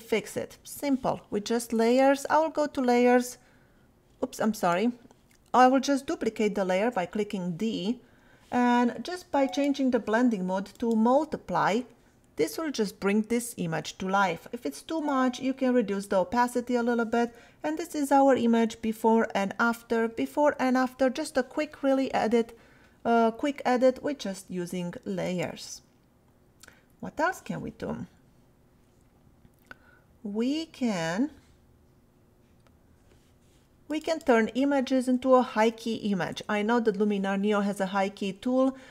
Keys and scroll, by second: 6.7 d, 18.4 \, 20.1 \.